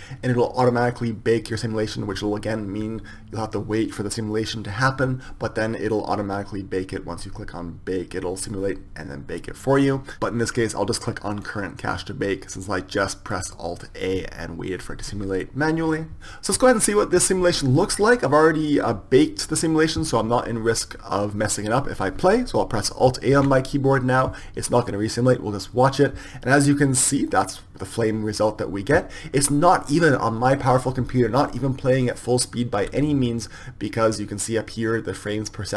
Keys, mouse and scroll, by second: 13.9-16.2 drag, 16.2 Escape.